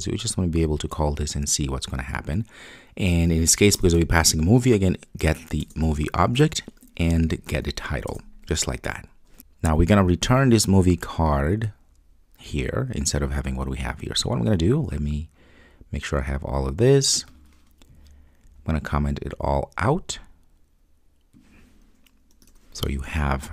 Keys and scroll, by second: 5.6 Return, 22.5 super+/.